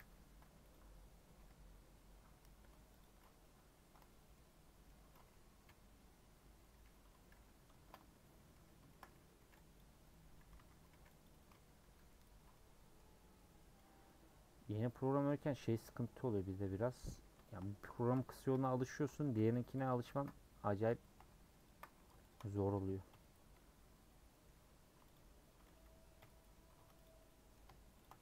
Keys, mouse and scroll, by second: 0.7 m, 1.5 Tab, 2.2 Tab, 3.0 click, 3.9 scroll down 2, 4.0 Tab, 4.3-5.6 middle drag, 5.6 /, 6.3-6.8 scroll up 2, 6.4 middle click, 7.3 /, 7.8 shift+middle click, 8.2 scroll up 2, 8.3 Tab, 8.9 shift+middle click, 9.0 scroll up 2, 9.5-11.9 typing, 12.3 scroll down 1, 12.5 middle click, 13.0 scroll up 3, 13.4-16.7 middle drag, 16.7 3, 17.1 middle click, 17.6 scroll up 2, 18.0-19.8 shift+middle drag, 19.8 click, 21.6 ctrl+click, 22.3 shift+click, 23.1 ;, 23.6 scroll up 1, 23.9-24.3 scroll down 2, 24.3 middle click, 24.5 3, 25.1 alt+Left, 26.2 ;, 27.0 Left, 27.2 middle click, 28.0 shift+Left, 28.1-28.2 middle drag.